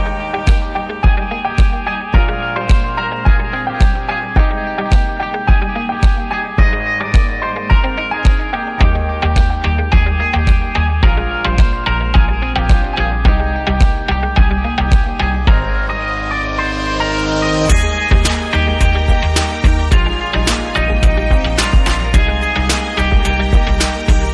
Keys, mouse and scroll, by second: 1.1 click, 1.8 click, 3.8 click, 5.1 click, 5.3 click, 5.8 click, 5.8 double click, 8.7 click, 9.0 double click, 10.2 double click, 11.3 click, 11.8 click, 13.4 double click, 14.3 click, 15.3 click, 16.5 click, 17.4 click, 18.7 right click, 18.7 right click, 18.9 double right click, 19.7 click, 20.2 double click, 20.3 double right click, 21.2 double click, 22.3 click.